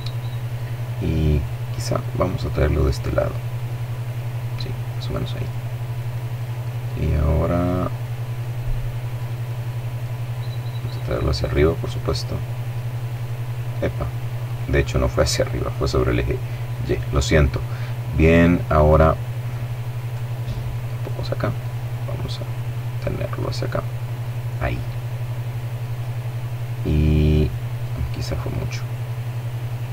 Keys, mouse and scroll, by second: 0.4-1.8 drag, 1.5 middle click, 2.2 middle click, 3.9 middle click, 5.3-7.4 middle drag, 8.4 middle click, 9.8-11.3 drag, 11.2 middle click, 11.7-12.2 scroll up 1, 12.3-12.8 scroll down 1, 13.4-14.6 drag, 14.3 middle click, 15.6-16.9 drag, 16.6 middle click, 19.0-22.1 drag, 22.3-23.6 drag, 23.7-24.9 middle drag, 24.9-25.7 scroll up 1, 26.2-26.7 scroll up 1, 27.5-29.5 drag, 29.4 middle click.